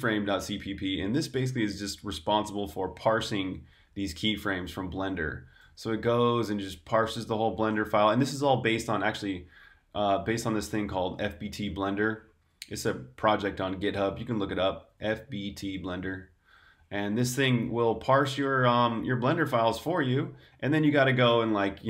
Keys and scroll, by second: 1.4-2.2 typing, 3.3-4.4 typing, 5.5-6.6 typing, 7.8-8.7 typing, 12.3 j, 14.5 Escape, 14.8-19.4 typing, 18.5 Escape, 21.6-21.8 typing.